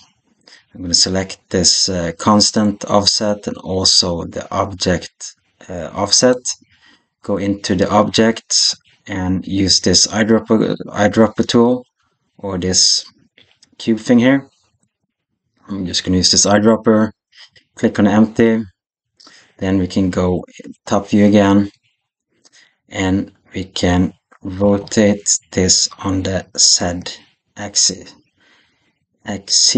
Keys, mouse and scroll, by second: 2.3 click, 6.0 click, 7.2 click, 14.8 click, 20.6 KP_7, 24.4 r.